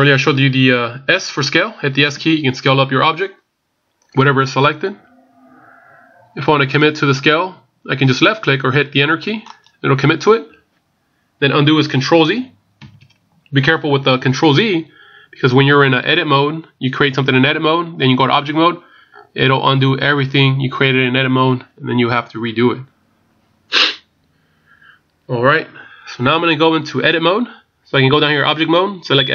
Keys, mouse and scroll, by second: 2.1 s, 12.8 ctrl+z, 28.5 click.